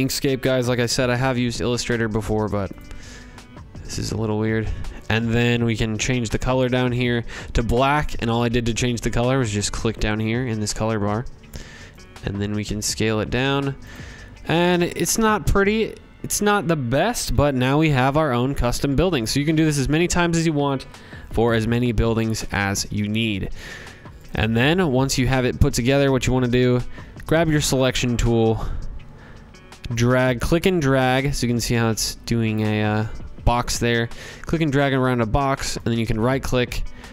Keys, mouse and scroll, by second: 1.7 click, 5.1 click, 9.8 click, 12.4 click, 16.2 z, 17.5 click, 18.1 click, 23.1 shift+click, 23.7 click, 25.0 click, 32.4-34.2 drag, 34.7 right click.